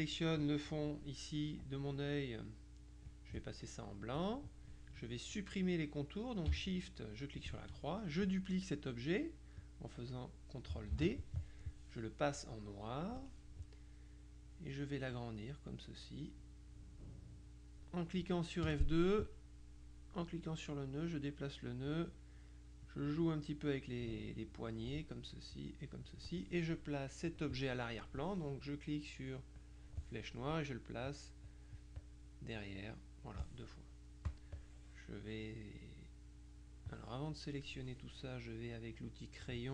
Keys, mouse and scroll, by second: 3.2 click, 7.2 shift+click, 11.0 ctrl+d, 13.1 click, 15.2-18.4 drag, 18.8 F2, 20.6-22.4 drag, 23.0-25.4 drag, 25.6 click, 27.4 click, 29.6 click, 32.0-33.2 drag, 34.4 click, 39.5 click.